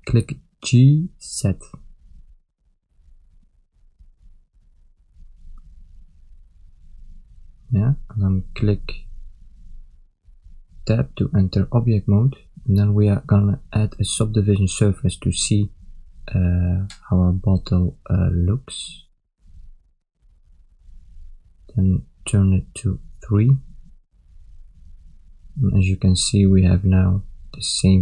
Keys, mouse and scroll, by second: 9.7 ctrl+alt+Tab, 9.7 ctrl+middle click, 10.5 shift+middle click, 15.8 click, 21.7 click, 25.0 ctrl+middle click, 25.7 shift+middle click, 25.8 click, 26.3 ctrl+middle click, 27.4 Tab.